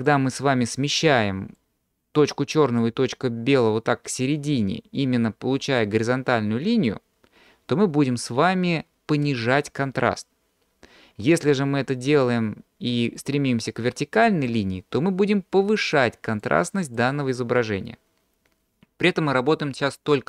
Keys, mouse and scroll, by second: 0.1 click, 1.6-3.0 drag, 11.3-12.4 drag, 13.2-15.7 drag, 16.4 click.